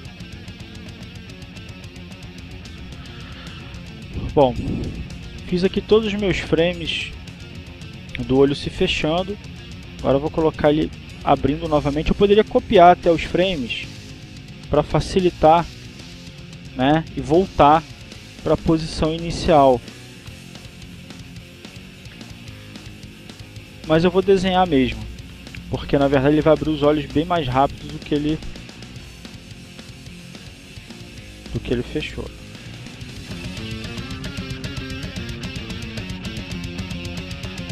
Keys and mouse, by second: 2.1-3.2 drag, 3.8 click, 5.2 click, 6.5-8.3 drag, 10.2-11.3 drag, 11.8 click, 12.6 click, 13.3 click, 16.4-17.7 drag, 17.9-19.2 drag, 19.7 click, 20.5 click, 23.6-24.6 drag, 24.9-28.8 drag, 29.2-30.6 drag, 30.7 click, 31.8 click, 32.5-34.8 drag.